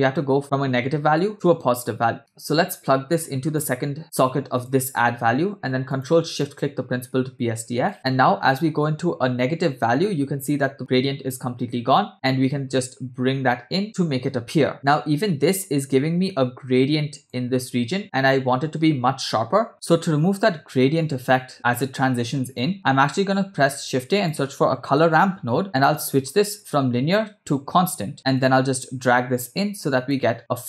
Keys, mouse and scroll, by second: 2.2 middle click, 2.2 scroll up 3, 2.5-3.7 drag, 4.6 click, 5.0 scroll down 2, 5.9 click, 6.6 ctrl+shift+click, 7.9-13.8 shift+drag, 14.7-17.4 shift+drag, 19.7 click, 20.8-22.7 drag, 22.8 click, 23.6 shift+a, 26.6-28.0 drag, 28.4-29.5 drag, 29.8 click.